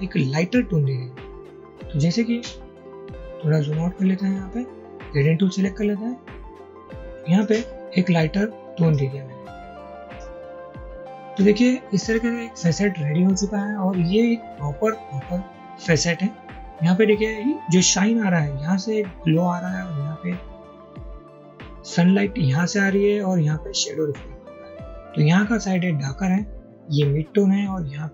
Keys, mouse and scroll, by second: 3.0-6.8 scroll down 2, 7.2 ctrl+z, 11.7 double click.